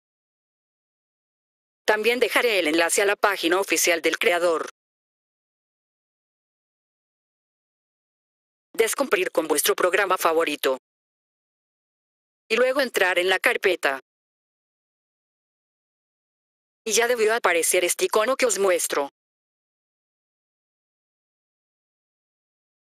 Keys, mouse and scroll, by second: 1.0 F4, 1.7 click, 7.8 F4, 8.7 click, 16.0 F4.